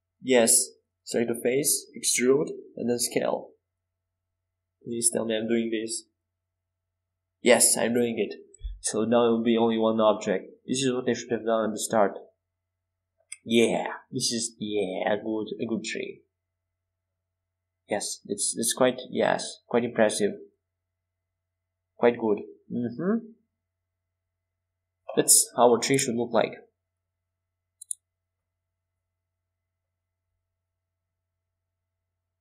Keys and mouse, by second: 1.1-2.6 middle drag, 2.6 KP_5, 3.1 KP_7, 3.9 KP_1, 4.6 KP_5, 6.8 e, 7.3 s, 9.5 e, 14.4 Tab, 17.2 KP_5, 24.0 KP_5, 24.2 KP_7, 25.0 KP_1, 30.7 Tab.